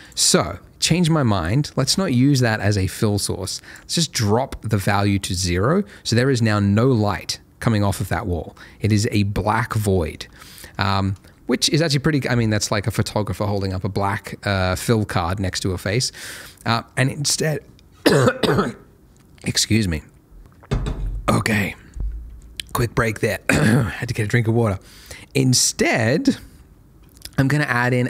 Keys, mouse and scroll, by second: 0.0 click, 3.4 click, 6.1 middle click, 8.4 scroll up 1, 8.9 middle click, 10.4 shift+middle click, 15.7 shift+middle click, 23.4 shift+middle click.